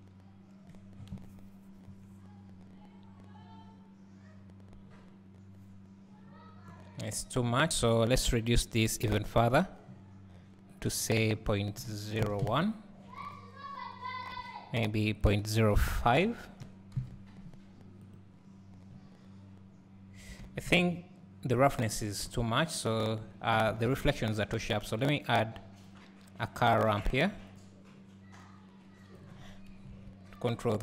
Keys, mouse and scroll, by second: 7.1 scroll up 1, 9.1-13.8 drag, 18.2 click, 18.9 scroll down 2, 19.8 scroll down 1, 19.8-21.8 scroll up 2, 21.8 scroll down 1, 22.8 click, 29.2 click, 30.3 KP_Decimal.